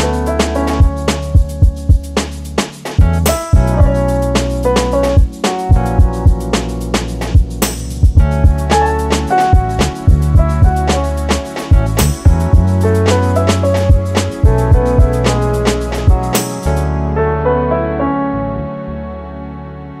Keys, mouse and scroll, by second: 1.6 scroll down 3, 1.7 middle click, 4.0-4.3 scroll down 1, 4.3 scroll up 1, 5.2 click, 5.6-6.6 scroll down 2, 8.5 middle click, 9.4 click, 9.8 click, 18.8 middle click, 19.2-19.7 scroll up 3, 19.8-20.0 scroll down 3.